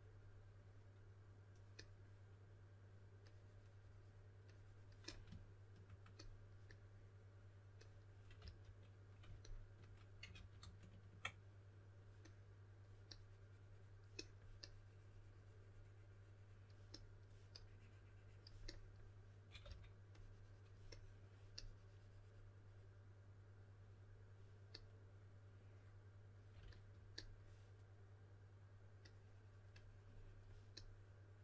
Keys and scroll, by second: 8.4 s, 10.3 super+z, 10.5 super+z, 19.6 s.